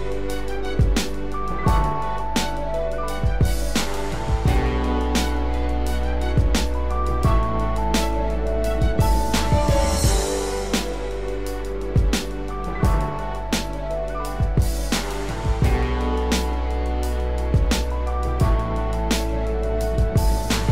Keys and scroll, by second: 6.2 ctrl+Return, 9.5 ctrl+d, 17.5 ctrl+Return, 19.6 ctrl+d, 20.6 ctrl+-.